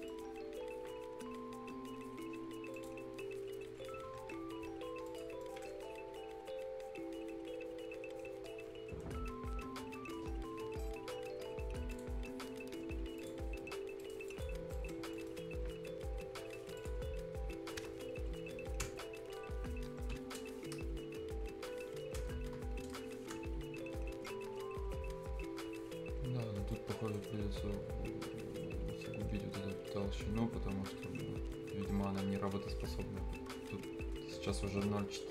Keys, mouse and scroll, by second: 0.0 middle click, 2.7 click, 4.2 Escape, 4.6 scroll up 1, 5.1 click, 5.4 middle click, 11.9 click, 13.8 scroll up 1, 14.0 right click, 14.3 click, 14.6 scroll down 1, 14.7 right click, 15.0 scroll up 1, 15.1 middle click, 16.8 click, 17.0 scroll down 1, 17.6-19.4 scroll up 1, 23.4 Return, 24.8-25.4 scroll up 1, 25.4 scroll down 1, 25.9-26.2 scroll up 1, 26.5 scroll down 1, 26.7 middle click, 27.0 right click, 27.3-28.2 scroll up 1, 28.2 scroll down 1, 28.5-28.9 scroll up 1, 31.2-32.2 scroll up 1, 32.2 scroll down 1, 32.6-33.0 scroll up 1.